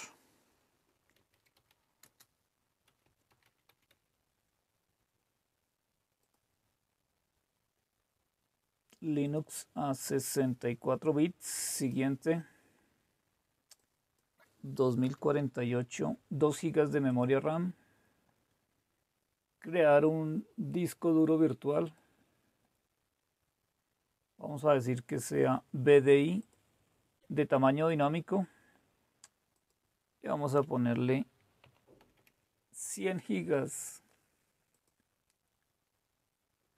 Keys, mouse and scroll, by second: 1.0 Caps_Lock, 1.0-6.1 typing, 6.2 click, 9.3 click, 11.8 click, 13.8 click, 14.1-15.5 typing, 17.1 click, 21.8 click, 26.4 click, 27.9 click, 29.6 click, 30.6 Delete, 31.3-32.6 typing, 34.7 click.